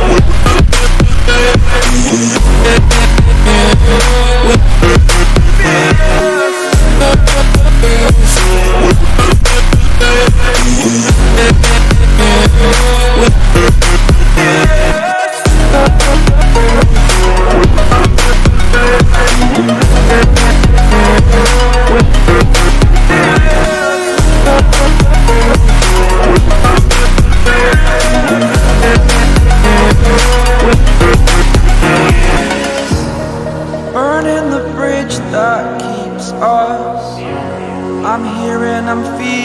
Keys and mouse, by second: 1.7 click, 3.8 click, 6.4 click, 7.1 ctrl+t, 8.6 click, 9.7 click, 10.3 ctrl+t, 11.5 click, 12.8 shift+click, 14.1 click, 15.2 shift+click, 19.0 Up, 20.3 Right, 21.5 Return, 22.8-23.9 drag, 26.6 click, 27.3 click, 28.1 ctrl+t, 29.2 click, 30.4 click, 31.0 click, 32.3 ctrl+t, 33.8 click, 35.1 Return, 35.8 click, 37.3 click, 38.6 ctrl+t.